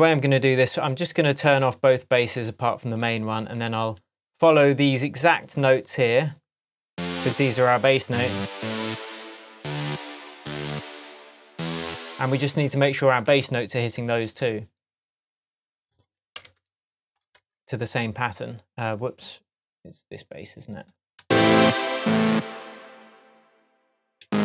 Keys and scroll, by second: 11.9 shift+Tab, 16.3 typing, 17.4 p, 21.2 space, 24.2 Down.